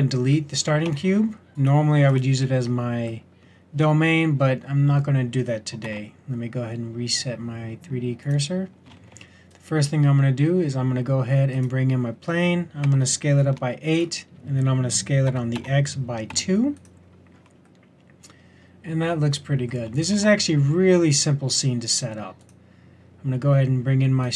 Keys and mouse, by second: 0.8 x, 5.8 shift+s, 8.9 shift+a, 12.8 s, 15.2 s, 20.1 shift+a.